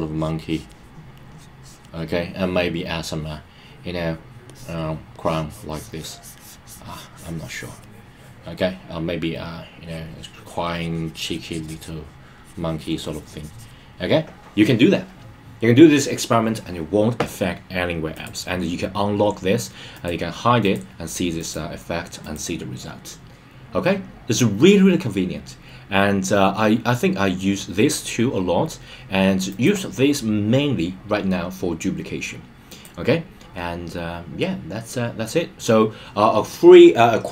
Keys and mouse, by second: 0.0 click, 1.3 click, 4.4 click, 5.1-7.8 drag, 9.8 click, 10.6 click, 11.4 click, 12.3 click, 13.0 click, 18.2 click, 19.9 click, 20.6 click, 21.3 click, 22.2 click, 29.4 click.